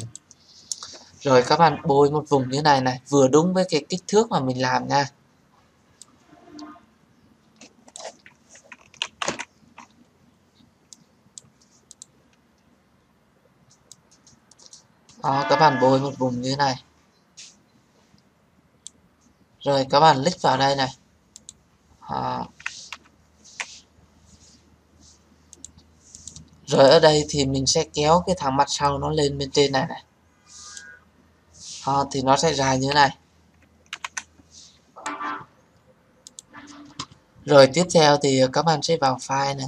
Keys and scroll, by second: 8.9 ctrl+z, 22.8 ctrl+0, 32.8 ctrl+-.